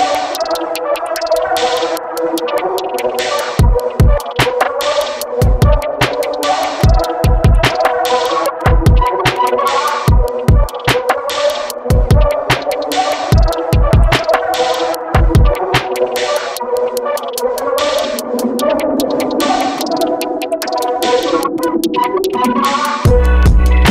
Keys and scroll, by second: 4.4 5, 4.8 Return, 23.0 6.